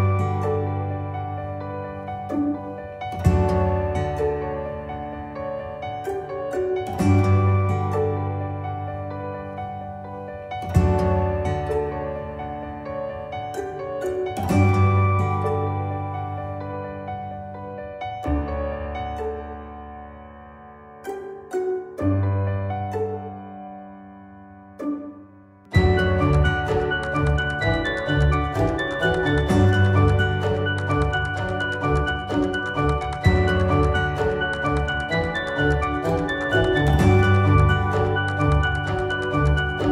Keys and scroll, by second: 35.8 z, 36.7 ctrl+z, 38.7 ctrl+z.